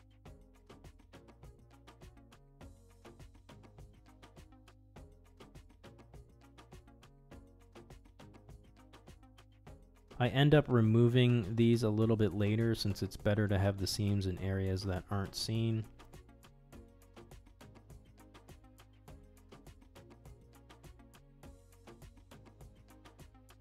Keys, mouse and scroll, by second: 2.3-3.6 middle drag, 5.3-6.4 middle drag, 6.9 alt+click, 8.1 ctrl+e, 9.8 middle click, 11.0 middle click, 11.9 middle click, 12.9 shift+middle click, 13.1 middle click, 13.8 middle click, 14.6 alt+click, 16.9 ctrl+e, 19.1 ctrl+e, 22.0-23.6 middle drag.